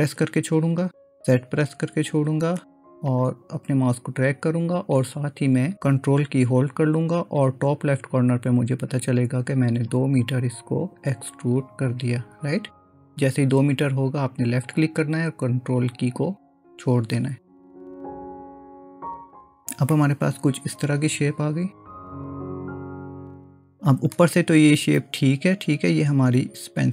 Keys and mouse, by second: 0.1 e, 19.9-24.2 middle drag, 26.6 click.